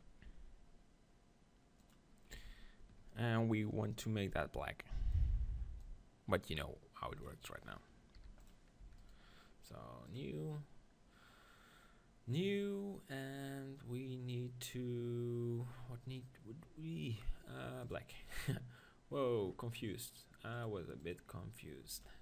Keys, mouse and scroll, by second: 0.2 g, 1.9-3.6 drag, 2.3 z, 5.0 c, 7.4-19.5 right drag, 8.3 p, 8.8 Tab, 10.2-19.7 drag, 21.1-22.2 drag.